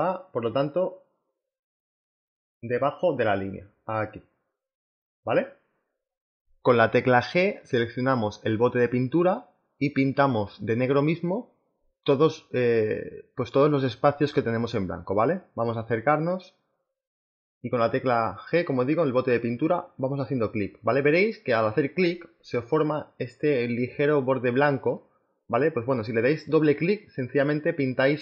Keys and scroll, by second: 7.5 g, 13.8 z, 16.3 b, 25.8 z.